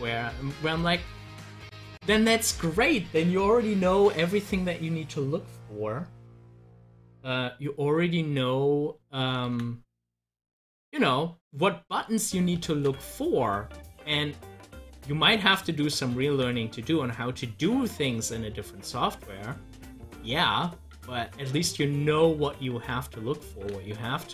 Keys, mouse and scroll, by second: 0.8 ctrl+z, 1.4-5.0 drag, 8.6 click, 9.5 ctrl+z, 12.8 ctrl+z, 16.2 ctrl+z, 21.5-23.5 drag, 23.5 ctrl+z.